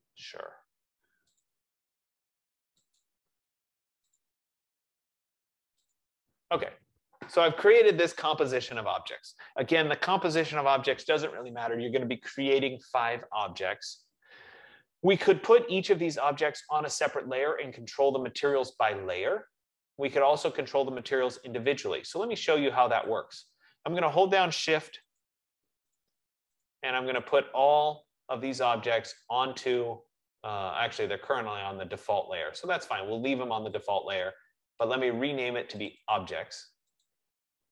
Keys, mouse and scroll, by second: 1.7 click, 3.4 click, 4.4 click, 6.3 click, 23.4 click, 25.5 shift+click, 26.3 click, 27.0 click, 27.7 shift+click, 31.5 F15, 34.4 click, 36.2 click, 36.4 click, 37.4 click.